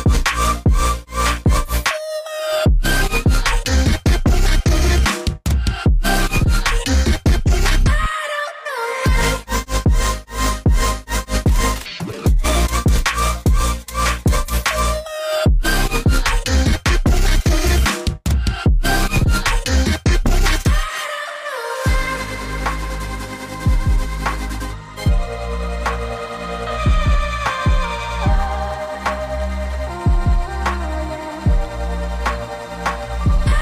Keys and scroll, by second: 21.4 typing, 24.6-25.3 typing.